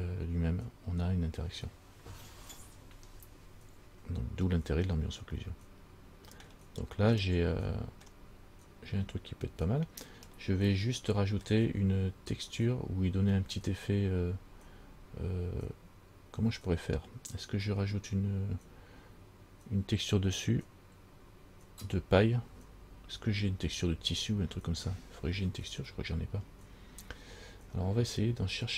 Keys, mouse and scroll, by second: 3.3-3.7 scroll down 2, 5.7 middle click, 7.5 middle click, 10.5 middle click.